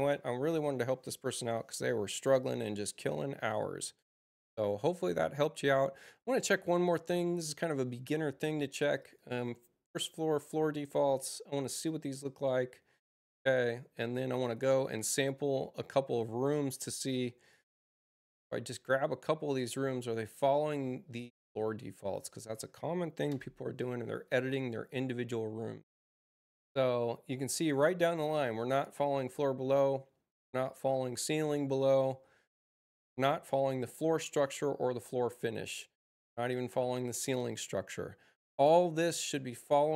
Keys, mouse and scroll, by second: 6.9 click, 8.7 click, 13.2 click, 14.3 click, 17.7 click, 19.5 click, 21.2 ctrl+click, 22.1 ctrl+click, 23.2 e, 25.9 click, 38.4 click.